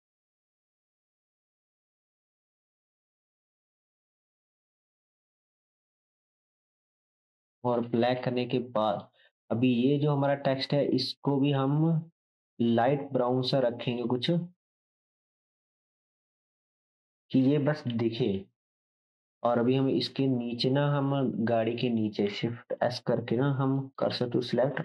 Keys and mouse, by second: 7.3-8.0 drag, 8.0 shift+middle drag, 8.0 shift+right drag, 8.1-10.9 drag, 9.0 middle click, 9.0 right click, 12.8-15.7 drag, 15.8-17.5 middle drag, 15.8-17.5 right drag, 16.4-17.5 drag, 17.9 ctrl+s, 22.7 shift+s.